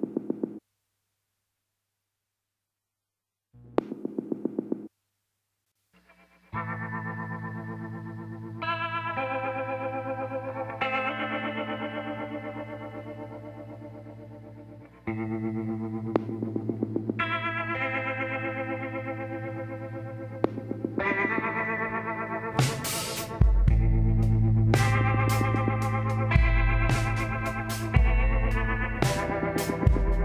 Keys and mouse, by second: 1.8-4.7 drag, 2.0 b, 5.3 g, 9.2-10.9 drag, 9.7 b, 11.3-13.1 middle drag, 13.1-14.8 drag, 17.6 click, 19.6-21.4 drag, 19.8 b, 22.1 click, 24.5-26.3 drag.